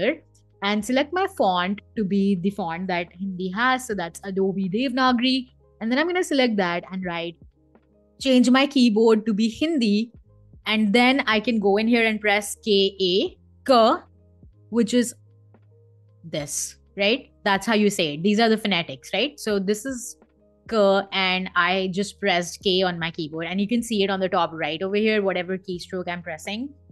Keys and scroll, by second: 2.1-3.9 typing, 11.7 k, 12.1 a, 13.4 BackSpace, 13.6 Escape, 26.7 k.